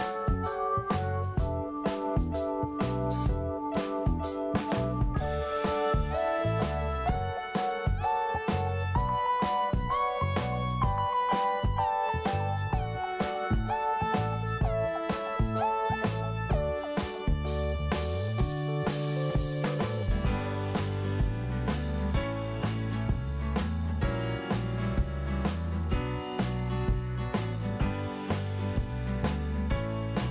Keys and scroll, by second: 1.4 alt+r, 1.8 Delete, 2.8 alt+r, 3.0 Delete, 4.1 alt+r, 4.3 Delete, 8.2-9.1 typing, 27.1 BackSpace, 27.1 Return, 28.9-30.3 typing.